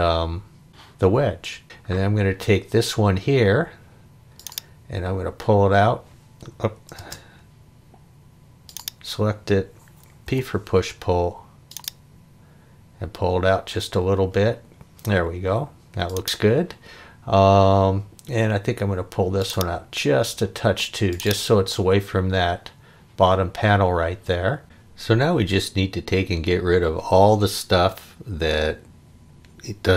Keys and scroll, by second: 6.6 Escape, 7.0 space, 10.3 p.